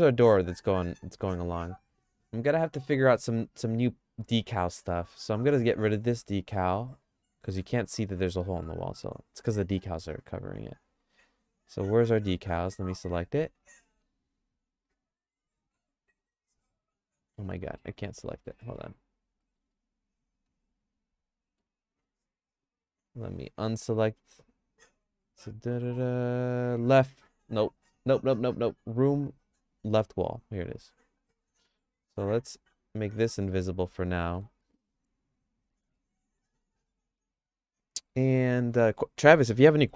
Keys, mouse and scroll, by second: 0.8 middle click, 10.3 click, 17.4 middle click, 17.8 shift+middle click, 18.9 click, 19.4 middle click, 19.8-21.7 shift+middle drag, 21.9 click, 24.0 click, 32.5 click, 33.2 middle click, 33.6 shift+middle click, 34.6 middle click, 35.9 middle click, 36.2 scroll up 1, 36.6 shift+middle click.